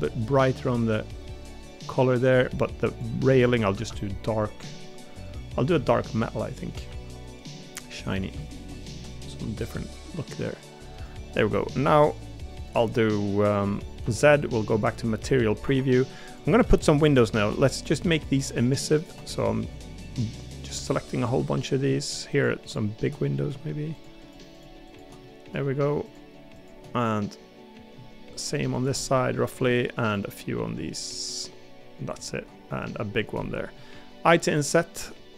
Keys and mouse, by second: 0.2 shift+middle click, 0.5 g, 4.5 g, 6.0 shift+middle click, 6.9 g, 8.5 shift+middle click, 11.7 middle click, 12.9 middle click, 15.2 middle click, 15.6 3, 16.3 click, 17.6 middle click, 19.2 middle click, 21.4 middle click, 23.2 middle click, 25.2 middle click, 26.9-27.9 middle drag, 29.0 middle click, 32.7 middle click, 33.4 middle click.